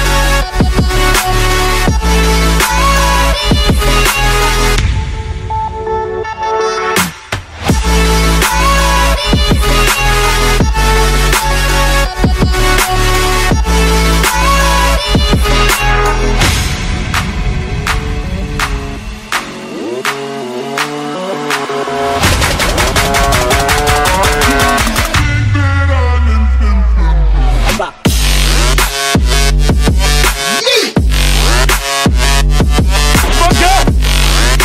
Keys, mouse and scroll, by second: 1.7 click, 2.5 click, 3.9 click, 5.2 click, 6.2 click, 7.5 click, 8.3 click, 10.1 click, 11.4 click, 13.8 click, 18.1 click, 20.1 click, 20.6 click, 21.6 click, 22.4 click, 23.6 click, 24.3 click, 24.7-25.9 typing, 26.6 click, 29.2 click, 31.3 click, 32.6 click, 33.0 click, 34.5 click.